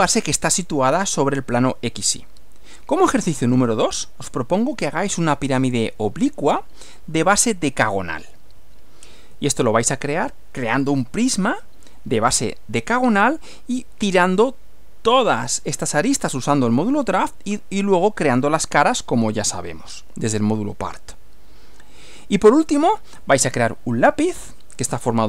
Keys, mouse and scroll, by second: 1.9 Right, 9.3 Right, 22.0 Right.